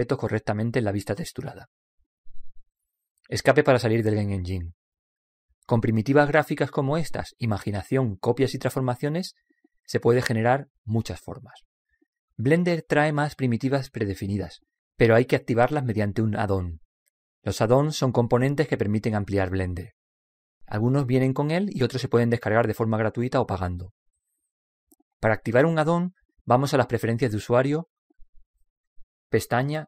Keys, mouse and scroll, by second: 3.9 Escape, 29.7 click.